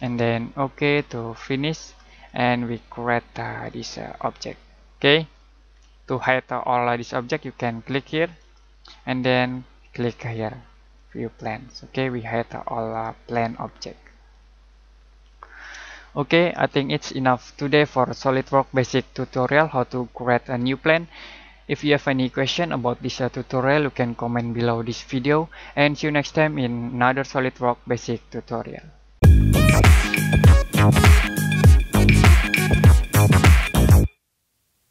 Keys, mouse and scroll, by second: 0.7 click, 2.2 middle click, 4.9 scroll down 1, 5.2 scroll up 1, 8.3 click, 10.9 click, 13.7 middle click, 15.8 middle click.